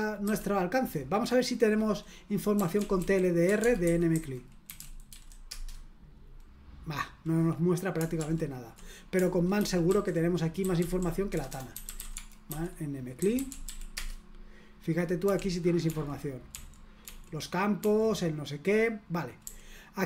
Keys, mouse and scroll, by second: 0.2 q, 2.3-5.6 typing, 8.2 ctrl+p, 9.5 ctrl+w, 9.9 ctrl+w, 10.5-14.1 typing, 15.2-17.0 typing, 19.4 d.